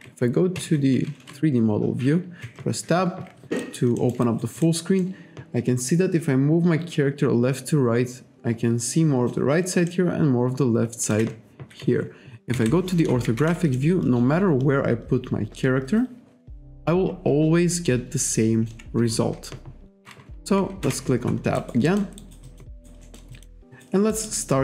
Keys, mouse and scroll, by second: 0.6 F2, 2.4 Tab, 3.6 alt+right click, 3.9 alt+scroll up 1, 4.0 alt+middle click, 4.2 alt+right click, 4.6 alt+middle click, 5.0 alt+middle click, 9.9 alt+middle click, 12.6 F6, 13.8 alt+middle click, 20.8 Tab, 21.6 alt+right click, 21.9 alt+middle click, 22.2 alt+right click, 22.8 alt+right click, 23.7 alt+right click, 24.1 alt+right click.